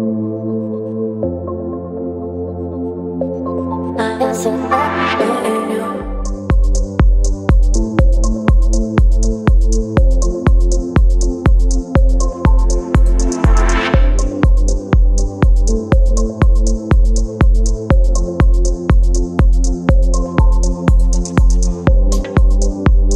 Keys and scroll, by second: 4.4 space, 14.3 space, 22.7 v.